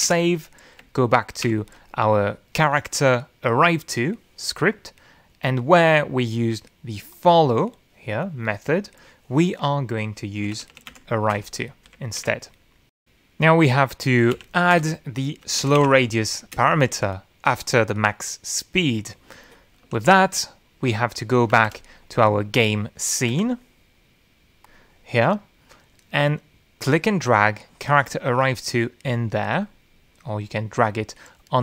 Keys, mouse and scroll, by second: 0.7 ctrl+s, 2.1 alt+Left, 6.3-7.3 drag, 7.8 click, 10.9-12.0 typing, 12.5 Delete, 13.0 ctrl+s, 16.1-18.1 typing, 16.5 Return, 18.3 Return, 21.7 ctrl+s, 23.5 ctrl+shift+F11, 25.1 F1, 26.5 click, 27.4 middle click, 29.1-31.6 drag.